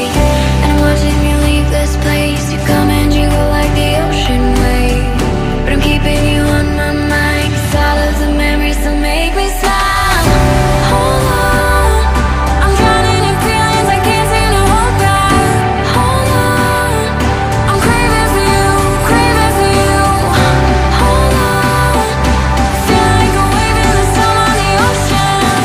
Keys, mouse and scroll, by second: 16.8 ctrl+click, 18.4 ctrl+d.